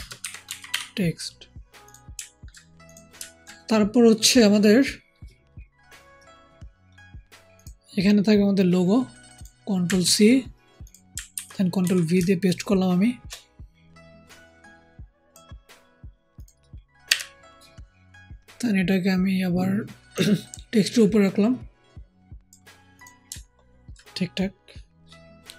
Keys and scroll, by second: 9.9 ctrl+c, 11.2 ctrl+v, 11.7 ctrl+t.